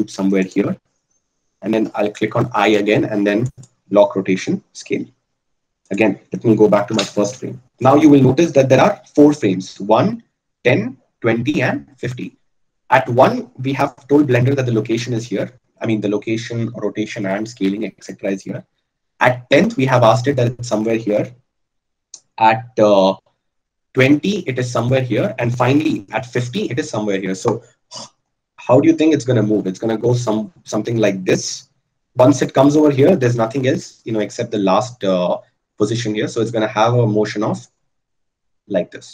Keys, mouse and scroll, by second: 2.6 i.